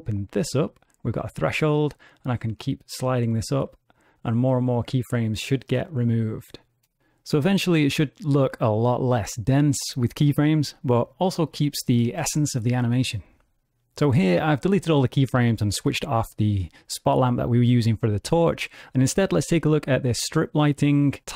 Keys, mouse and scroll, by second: 0.1 click, 1.9 click, 2.7 click, 8.1 space, 12.7 space, 20.7 click.